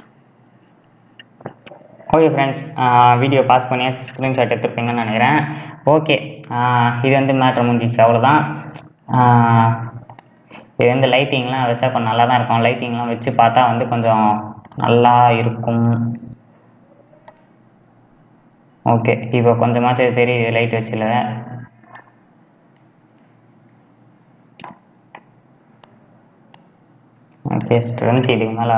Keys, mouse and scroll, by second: 8.1 click, 10.9 click, 11.5-12.1 scroll up 2, 12.1-17.6 middle drag, 17.6 click, 22.1-28.7 drag.